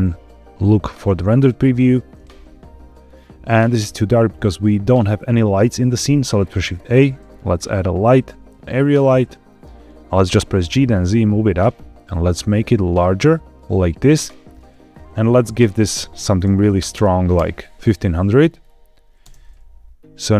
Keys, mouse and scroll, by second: 3.0-3.9 scroll up 1, 3.9-5.3 scroll down 1, 6.1 shift+a, 9.4-10.2 scroll down 1, 10.2 g, 10.5 z, 11.4 click, 14.8 click, 15.4-17.3 drag, 16.8 KP_0, 18.3-18.8 scroll up 3, 19.1 space, 19.9 scroll down 1.